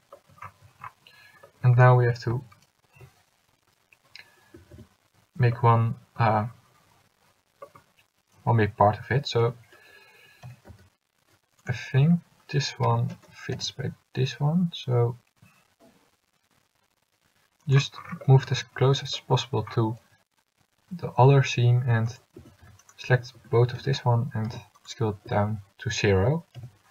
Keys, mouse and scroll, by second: 4.7 a, 4.9 a, 9.6 l, 10.6 g, 12.1 a, 13.0 l, 13.7 g, 20.2 g, 22.5 a, 23.0 c, 24.0 s, 25.4 a, 26.7 l.